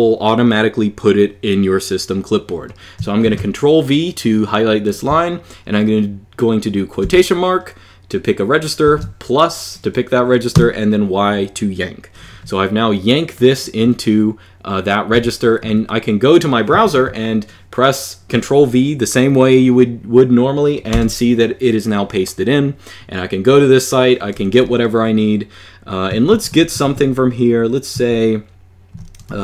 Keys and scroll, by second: 3.0 shift+v, 6.8 ", 10.3 y, 14.9 super+Page_Down, 16.6 ctrl+v, 20.7 Return, 25.8-29.0 typing.